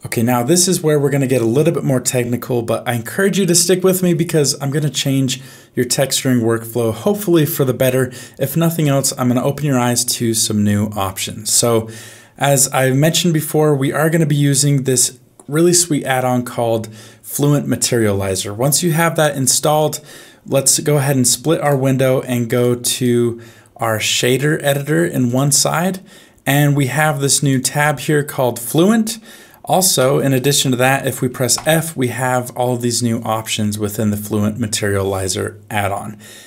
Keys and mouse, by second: 12.9 middle click, 22.6 right click, 24.2-25.3 drag, 27.4 click, 30.0 n, 31.5 f.